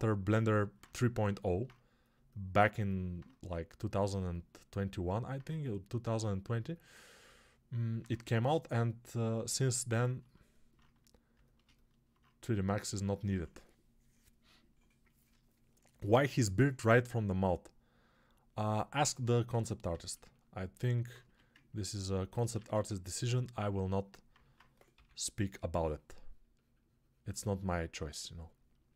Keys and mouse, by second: 0.7-19.0 shift+drag, 19.0-22.8 alt+shift+right drag, 21.1 1, 22.6 alt+q, 22.8-28.9 ctrl+drag, 24.8 p.